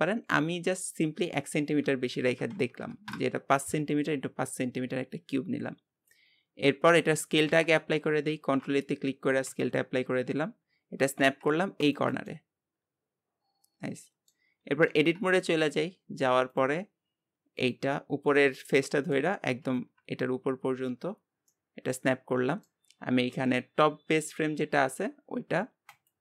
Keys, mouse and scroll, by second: 4.4 scroll up 1, 5.3-6.4 drag, 6.4-7.1 scroll down 1, 7.1 ctrl+a, 8.3 ctrl+a, 11.1 g, 12.3-14.7 middle drag, 14.7 Tab, 15.4-16.5 shift+middle drag, 16.5-18.6 drag, 18.6-19.7 shift+middle drag, 19.7-21.5 drag, 21.5-24.6 middle drag, 26.0-26.2 drag.